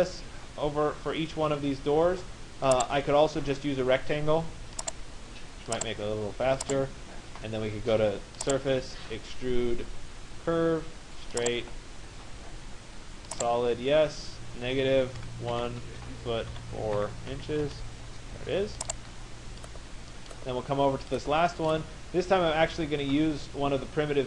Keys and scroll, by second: 15.5 1, 16.9 4, 17.6 Return.